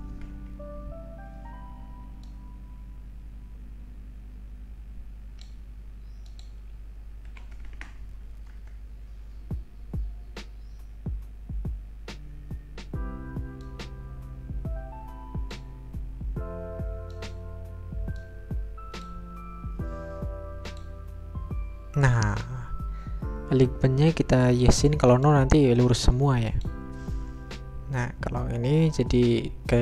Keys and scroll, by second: 0.5 Return, 7.3 Delete, 7.7 BackSpace, 8.5 BackSpace, 9.5 Return.